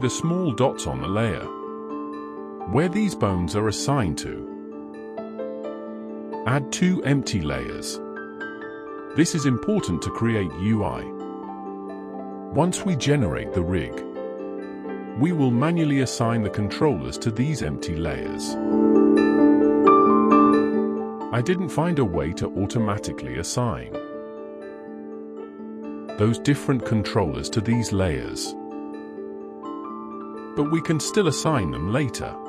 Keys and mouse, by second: 1.8-3.1 middle drag, 5.5 click, 6.5 click, 7.0 click, 8.2 click, 8.8-22.0 drag, 22.0 BackSpace, 25.2 click, 26.0 shift+click.